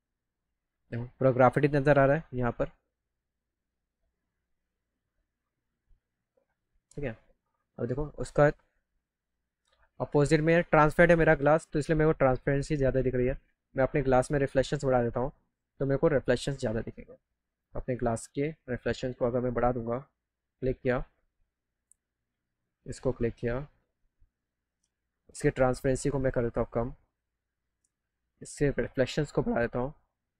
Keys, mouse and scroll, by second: 3.9 middle click, 4.5 middle click, 12.2 click, 13.1 click, 17.4 click, 18.6 click, 19.3 click, 19.6 click, 20.4 click, 22.4 click, 25.1 click, 25.6-26.0 scroll up 2, 26.0-27.1 drag, 27.7 click, 28.7 click, 29.7 click.